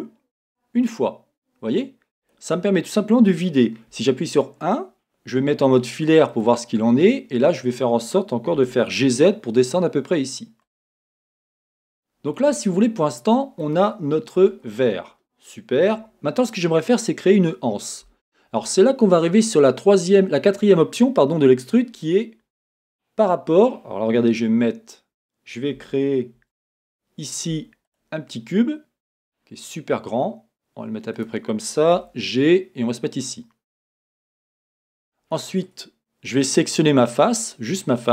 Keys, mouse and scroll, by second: 2.3 click, 4.0 KP_1, 5.5 z, 7.0 scroll, 8.6 g, 10.8 click, 11.8-12.8 shift+middle drag, 14.0-14.4 scroll down 1, 14.4 Tab, 16.0 KP_1, 16.9-21.1 scroll up 2, 17.2-21.1 middle drag, 26.4 shift+a, 29.2 s, 31.3 click, 32.0 g, 34.0 click, 35.0 Tab, 35.4-37.3 middle drag, 37.3 click.